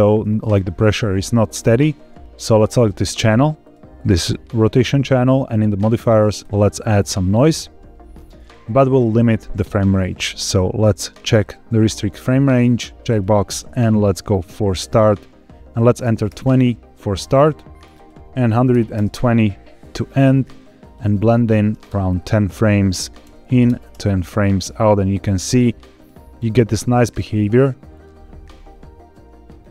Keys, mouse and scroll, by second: 2.6 click, 3.1 click, 3.5 click, 3.9 click, 5.7 click, 6.3-7.5 drag, 8.8 scroll down 2, 9.9 click, 10.5 scroll down 2, 11.2 click, 11.7-12.1 scroll down 2, 13.0-14.2 drag, 16.2 click, 17.8 click, 18.6 click, 20.7-24.4 drag, 25.9 click, 27.9-29.7 drag.